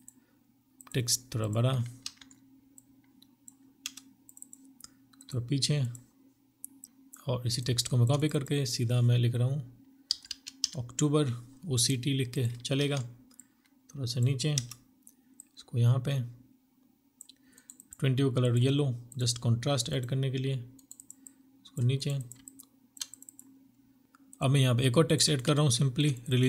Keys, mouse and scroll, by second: 0.9 ctrl+t, 2.7 Return, 3.3 double click, 6.8 alt+click, 7.0 alt+click, 9.1-9.5 typing, 11.7 ctrl+t, 13.4 Return, 14.4 ctrl+t, 14.7 Return, 16.4 right click, 19.6 right click, 20.1 double click, 20.9 right click, 21.3 alt+click, 24.0 right click, 24.4 alt+click, 25.0 alt+click, 25.8 typing.